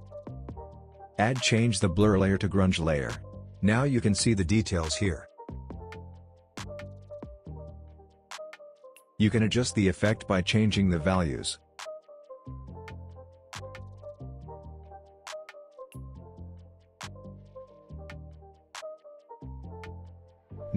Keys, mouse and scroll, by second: 5.5 alt+scroll up 1, 7.1 alt+scroll down 1, 9.6-13.1 drag.